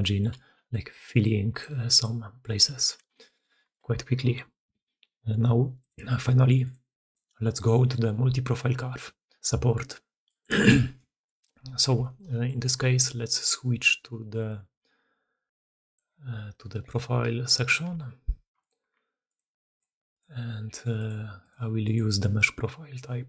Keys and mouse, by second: 0.8-23.2 typing, 2.9 ctrl+z, 3.3 ctrl+z, 3.6 middle drag, 3.8 Tab, 5.4 middle click, 5.8-6.9 middle drag, 7.1 middle click, 7.8-8.7 middle drag, 11.9 shift+drag, 12.2 middle drag, 15.7 click, 18.5 ctrl+click, 19.2 click, 19.7 click, 20.0 click, 20.9 drag, 21.4 middle click, 21.7-23.2 middle drag.